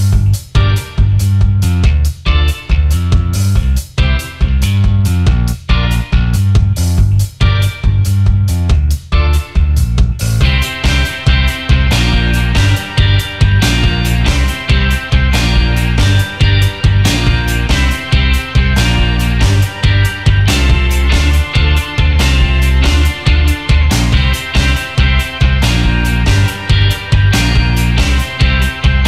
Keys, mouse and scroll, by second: 0.1-1.3 typing, 2.2 alt+scroll down 1, 2.7 alt+scroll down 1, 3.1 alt+scroll up 1, 3.5 space, 5.0 alt+scroll up 1, 9.5 ctrl+x, 10.8 double click, 11.7 ctrl+f, 13.1 double click, 14.8 alt+scroll down 1, 15.2 alt+scroll up 1, 15.8 space, 15.9 alt+scroll up 1, 17.6 alt+scroll up 1, 18.6 alt+scroll down 1, 19.4 alt+scroll down 1, 20.9 space, 27.1 double click, 27.9 double click, 28.2 alt+scroll down 1, 28.6 space.